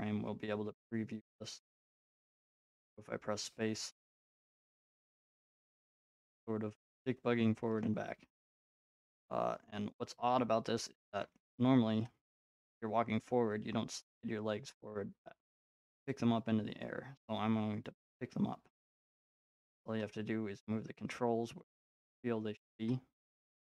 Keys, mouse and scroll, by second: 0.0-1.6 drag, 3.9 middle click, 5.0-7.3 middle drag, 8.2 middle click, 9.7-11.0 middle drag, 12.6-15.1 middle drag, 16.1-19.7 drag.